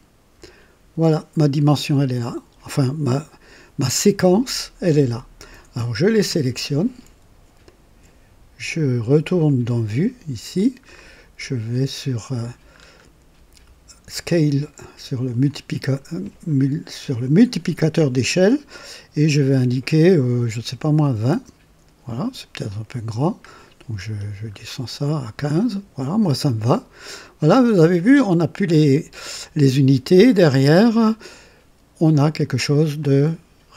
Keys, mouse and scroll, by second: 6.5 click, 7.7 shift+click, 9.4 click, 10.9-11.3 scroll up 2, 12.7-13.1 scroll up 1, 15.5 click, 21.0 KP_2, 21.3 KP_0, 23.5-24.7 scroll down 6, 24.1 typing, 32.1 click, 33.0-33.7 drag.